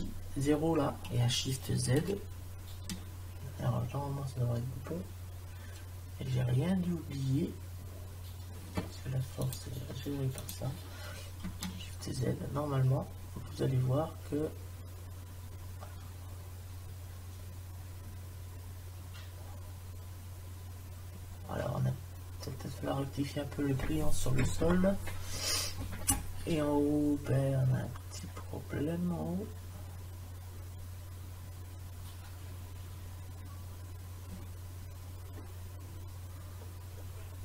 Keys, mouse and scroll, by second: 9.4-10.7 drag, 11.7 shift+z, 35.3 middle click, 36.7 middle click, 37.0 middle click, 37.2 middle click.